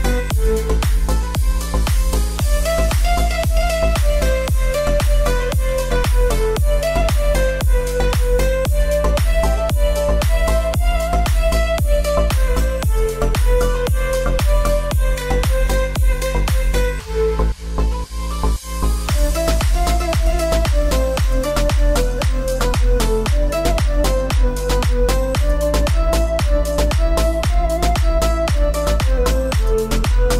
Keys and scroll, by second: 5.7 0, 6.3 Return, 8.7 Return, 25.8 Return.